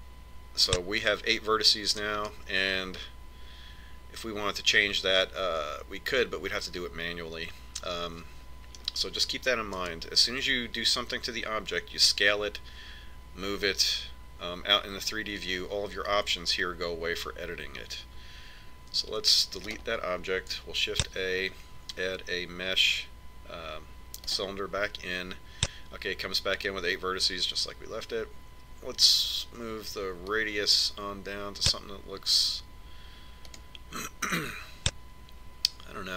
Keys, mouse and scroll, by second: 3.4-5.3 middle drag, 11.0 KP_1, 20.3 x, 22.1 shift+a, 31.5 click, 34.8 click.